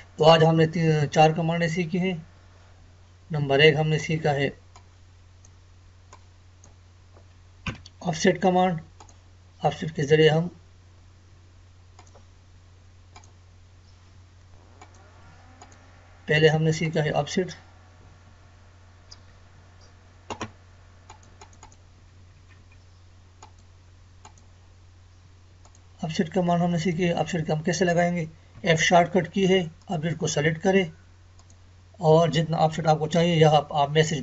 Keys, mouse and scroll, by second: 4.0-7.7 drag, 7.7 Delete, 9.0 click, 12.0 click, 14.2 Escape, 14.8 click, 18.3 Escape, 21.1 click, 22.0 Escape, 23.4 click, 28.5 click, 29.9 click.